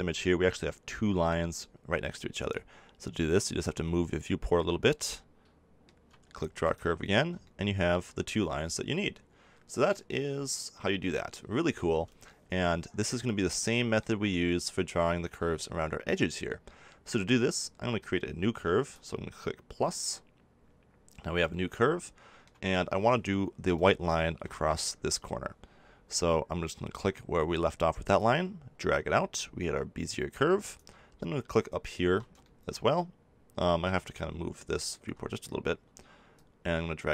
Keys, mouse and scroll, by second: 1.5-3.1 middle drag, 6.6-8.5 drag, 18.9-21.5 drag, 21.9-24.5 middle drag, 28.1-30.7 drag, 32.8 middle click, 33.1 click, 33.2-36.3 middle drag, 36.3-37.1 drag.